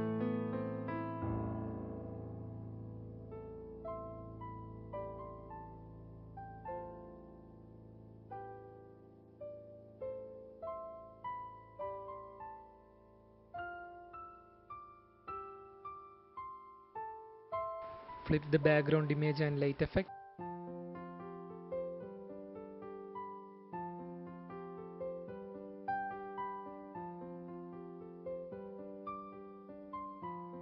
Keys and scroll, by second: 2.2 space, 4.0 f, 4.3 f, 17.7 ctrl+t, 21.2 Return, 29.2 ctrl+0.